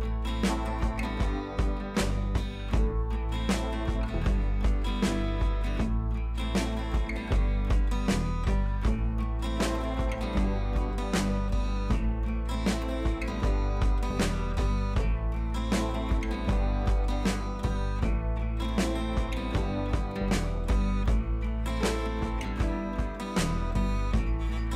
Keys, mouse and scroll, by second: 3.3-3.6 scroll down 1, 5.3 scroll up 1, 6.2 click, 7.6 ctrl+c, 8.0 click, 8.6-9.7 alt+click, 10.0 ctrl+v, 11.3 click, 11.6-12.6 scroll up 1, 12.6-14.3 drag, 17.6 ctrl+c, 17.7 click, 18.8-20.7 alt+drag, 21.4 ctrl+v, 22.1-24.7 drag.